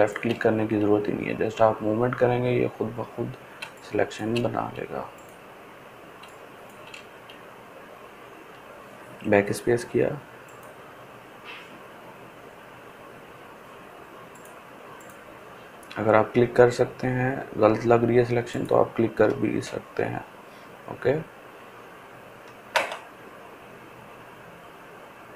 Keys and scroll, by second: 9.4 BackSpace.